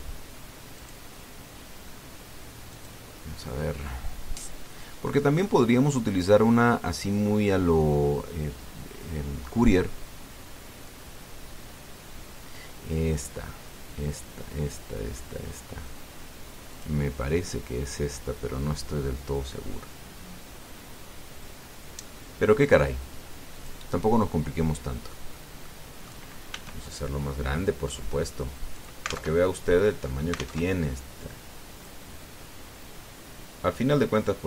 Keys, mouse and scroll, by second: 1.6 click, 3.5 click, 12.2-12.6 scroll down 1, 17.5 click, 18.6-19.2 scroll down 2, 19.6-20.6 scroll down 4, 20.8-21.4 scroll down 2, 24.3 click, 25.4 middle click, 26.4 middle click, 27.3 s, 29.5 click, 30.0 alt+Tab, 31.4 alt+Tab, 32.6-34.4 drag.